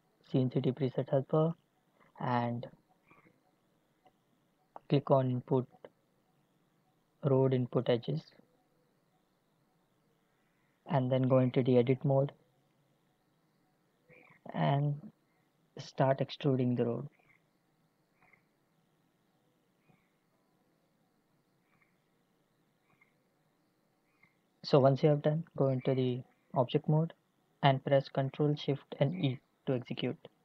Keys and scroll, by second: 11.4 Tab, 15.9 e, 17.4 e, 20.6 e, 23.1 e, 25.6 Tab, 28.9 ctrl+shift+e.